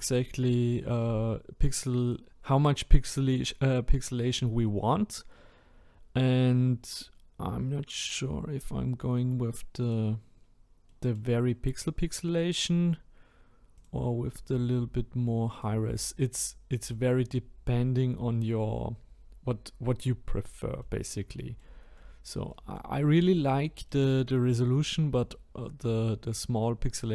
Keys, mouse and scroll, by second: 1.2-1.8 scroll up 2, 1.8-8.1 middle drag, 8.1-10.4 drag, 10.4-10.9 scroll down 1, 10.9-11.4 middle drag, 11.4-12.3 scroll down 1, 12.3-15.6 middle drag, 15.6-16.1 drag, 16.1-17.5 middle drag, 17.5-17.9 scroll down 1, 17.9-20.0 scroll up 4, 20.3-20.9 scroll down 1, 20.9-27.1 middle drag.